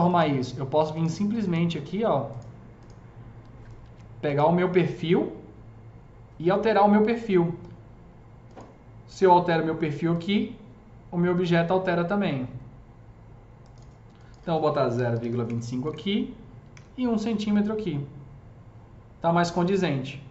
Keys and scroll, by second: 3.7 ctrl+z, 14.9 KP_Decimal, 15.0 KP_2, 15.1 KP_5, 15.3 Return, 15.7 Tab, 16.5 KP_1, 16.7 Return.